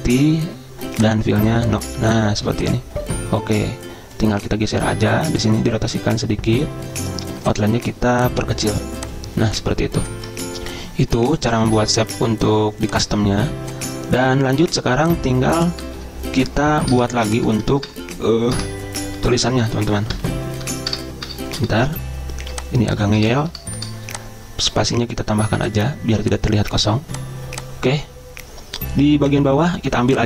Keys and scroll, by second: 16.1 Return, 17.1-19.8 typing, 17.7 Return, 20.3 Return, 20.8 BackSpace, 21.1 BackSpace, 23.4 BackSpace, 23.7 BackSpace, 23.9 BackSpace.